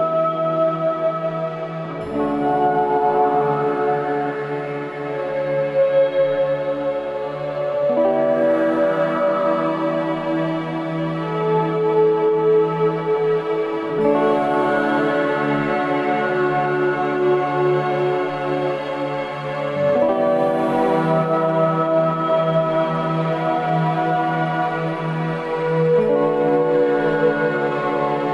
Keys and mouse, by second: 0.3-1.8 drag, 2.4 click, 3.0 click, 3.8-11.4 drag, 5.5 BackSpace, 5.7 BackSpace, 11.8 click, 12.0-19.2 drag, 21.3-22.5 middle drag, 23.5 ctrl+s, 26.9 middle click, 27.8 click, 28.2 Tab.